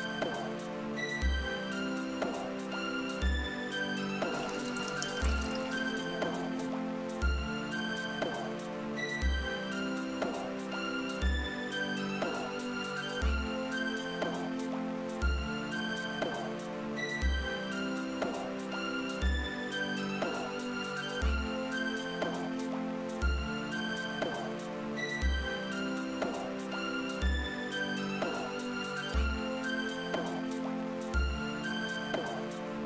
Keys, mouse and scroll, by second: 4.2 space, 7.0 space, 14.5 click, 15.7-17.6 drag, 21.3 click, 26.1 click.